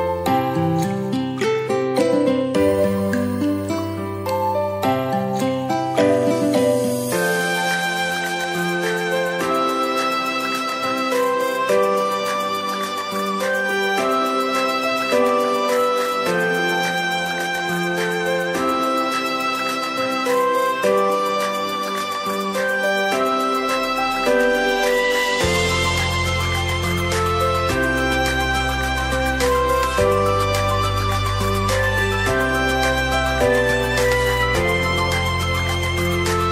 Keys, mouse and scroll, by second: 0.2 click, 22.7 click, 23.3-24.5 drag.